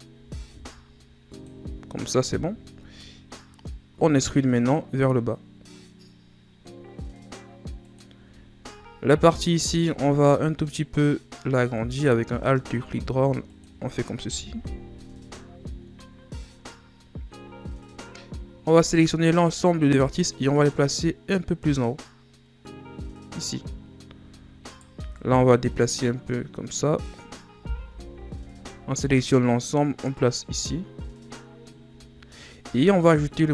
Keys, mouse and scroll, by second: 0.1 s, 2.2-2.6 scroll down 3, 3.8 e, 9.9-10.3 shift+scroll down 1, 10.3 middle click, 10.8-11.7 scroll up 3, 11.7 alt+right click, 12.7 s, 14.4 KP_1, 15.4-16.1 scroll down 6, 16.9-17.5 scroll down 1, 17.6-18.2 shift+scroll up 3, 18.2 a, 18.7 a, 19.1-19.5 scroll down 2, 19.5-20.7 shift+scroll up 6, 20.7-23.7 drag, 23.7-24.1 scroll up 2, 24.1 z, 24.6 right click, 24.9 b, 26.2-27.2 drag, 27.2 scroll down 2, 27.7-28.1 shift+scroll up 1, 28.1 a, 28.4 a, 29.5-31.8 drag, 31.8 z, 32.1-32.6 scroll up 2, 32.6 Tab, 33.3 scroll down 1.